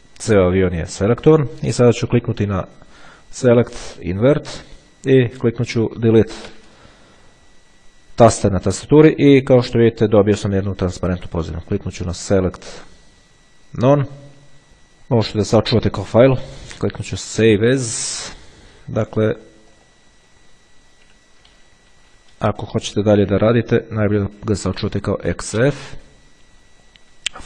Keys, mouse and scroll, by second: 3.3 click, 4.4 click, 6.6 Delete, 12.4 click, 14.0 click, 16.3 click, 18.0 click, 19.8 click, 20.8 KP_Subtract, 21.8 KP_1, 22.8 Delete, 23.8-24.7 typing.